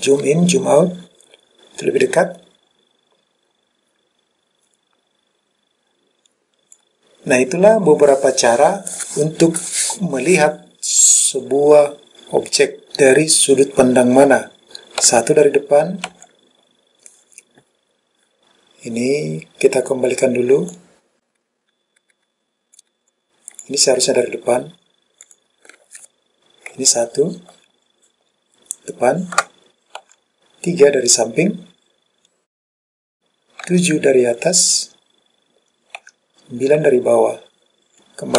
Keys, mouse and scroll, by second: 15.1 KP_1, 16.2 KP_1, 20.8 click, 23.1 click, 25.3 click, 26.8 KP_1, 30.2 KP_3, 33.8 KP_7, 36.1 KP_9.